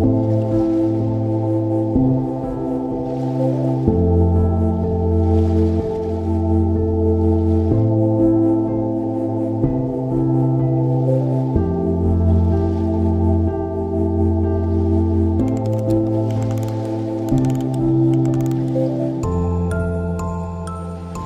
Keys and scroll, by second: 18.0 ctrl+j.